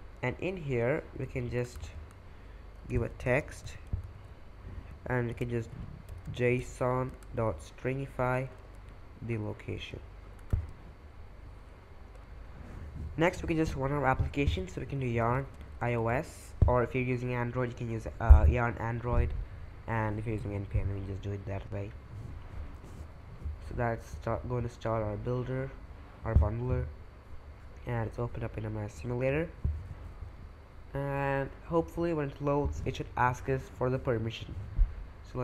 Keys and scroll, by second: 1.6 Return, 2.5-6.3 typing, 7.1 Return, 7.4-10.6 typing, 8.2 Return, 14.6-16.3 typing, 26.5-27.2 typing.